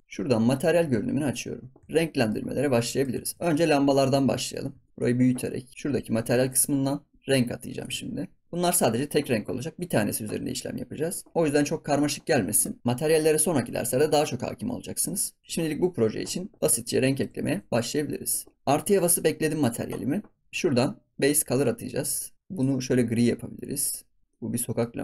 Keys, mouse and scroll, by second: 0.0 n, 1.2 click, 1.8 ctrl+s, 1.9-2.4 middle drag, 2.4 scroll up 3, 2.7-3.2 shift+middle drag, 3.2 ctrl+s, 3.5 click, 4.0 ctrl+s, 4.2 scroll up 3, 4.6 scroll down 1, 4.8 shift+middle click, 4.9-6.5 drag, 7.7-10.5 drag, 16.8 shift+middle click, 17.4 ctrl+s, 20.4 scroll down 2, 21.2 click, 24.2 scroll down 3, 24.3-24.9 middle drag, 24.9 scroll up 2.